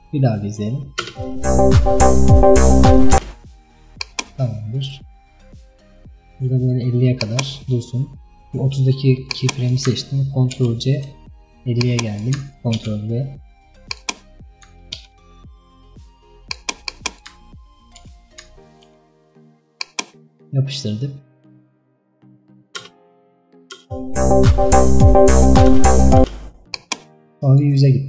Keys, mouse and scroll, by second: 4.0-7.3 drag, 9.4-14.1 drag, 19.9-22.9 drag, 22.9 space, 26.8-28.0 drag.